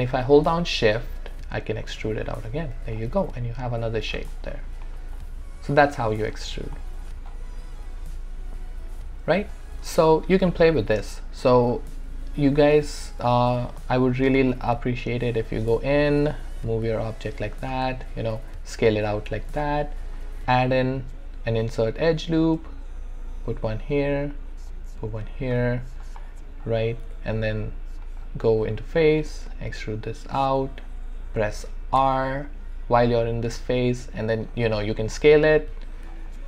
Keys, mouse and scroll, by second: 0.9-3.1 shift+drag, 3.0 alt+right click, 3.1 alt+right click, 3.3 alt+click, 4.4 alt+middle click, 4.9 alt+right click, 5.2 alt+click, 5.9 right click, 6.2 click, 6.8 alt+middle click, 7.3-11.5 alt+drag, 11.6 shift+right click, 12.1 r, 12.6-14.5 drag, 14.5 alt+click, 15.4 click, 16.1 w, 16.5 click, 17.0 alt+click, 17.8 r, 18.4-20.8 drag, 20.5-22.4 shift+right drag, 22.4-25.7 drag, 25.8 alt+click, 27.1 w, 28.0 right click, 28.6 click, 29.5-32.0 shift+drag, 32.0 r, 34.5-36.3 drag, 36.3 alt+click.